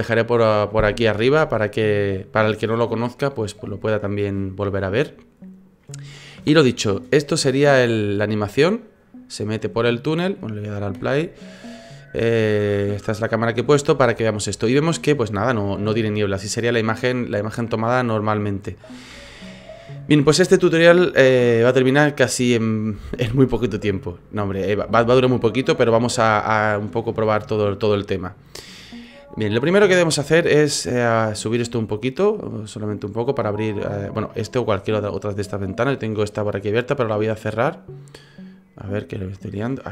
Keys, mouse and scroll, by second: 3.9 shift+middle click, 6.4 KP_0, 7.8 click, 10.9 space, 20.4 space, 21.4 click, 28.2 click, 31.3 click, 38.5 click, 39.6 click.